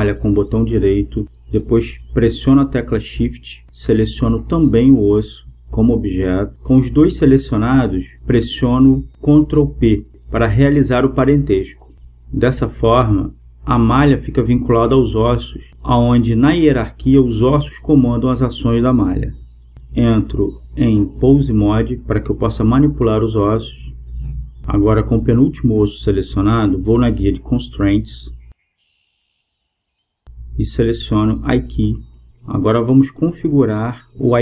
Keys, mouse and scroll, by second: 0.4-2.1 right drag, 4.2-6.1 right drag, 7.8 ctrl+p, 12.4-15.4 right drag, 20.4-22.2 drag, 23.6-25.3 right drag, 31.0-33.8 drag.